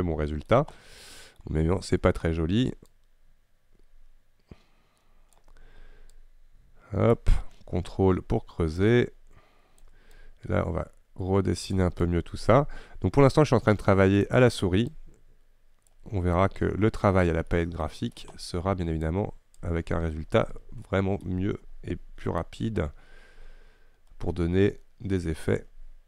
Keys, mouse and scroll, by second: 0.1-1.8 middle drag, 1.8-3.0 scroll up 2, 3.0-17.6 drag, 17.6-19.1 middle drag, 19.1-20.9 shift+drag, 20.9-22.5 middle drag, 22.5-25.5 drag.